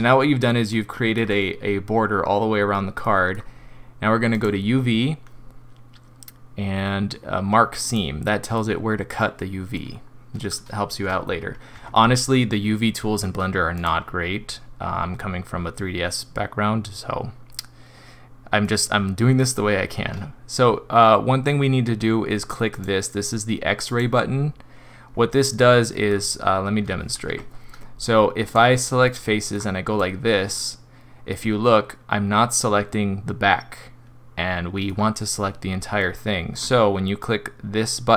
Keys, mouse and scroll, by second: 0.3 middle click, 1.7 middle click, 3.0 middle click, 4.3 click, 8.5 middle click, 9.8 scroll down 3, 11.7 Tab, 13.7 click, 18.6 middle click, 22.7 click, 23.9 click, 25.6 middle click, 27.3 Tab, 28.5 click, 29.0 middle click, 29.5 middle click, 30.0 click, 31.3 middle click, 36.0 middle click, 36.5 middle click.